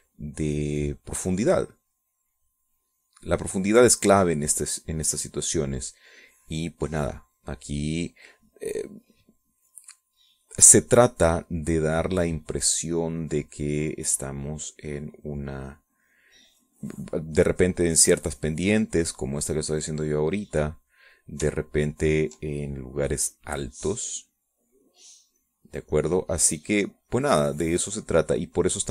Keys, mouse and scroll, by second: 1.6-2.9 drag, 3.0-6.9 drag, 6.9-8.6 drag, 11.1 middle click, 12.1 middle click, 12.9-20.2 drag, 20.2-22.0 drag, 22.8 ctrl+click, 23.5-28.9 ctrl+drag.